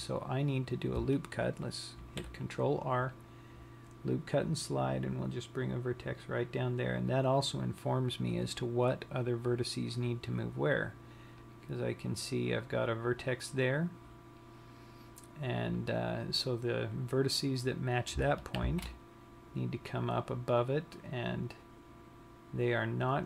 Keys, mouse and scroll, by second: 0.3 scroll down 1, 2.6 ctrl+r, 8.1 click, 9.7-10.2 scroll up 3, 12.3 click, 16.4 click, 19.2 shift+v.